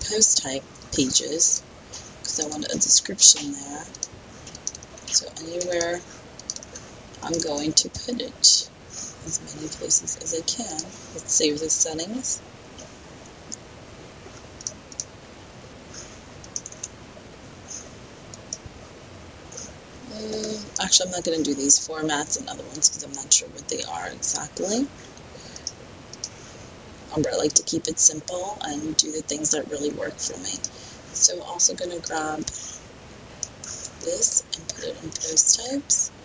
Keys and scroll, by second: 1.1 super+c, 2.6 super+v, 4.9 super+v, 6.7 super+v, 7.5 super+v, 16.7 super+v, 33.8 super+c, 36.0 super+v.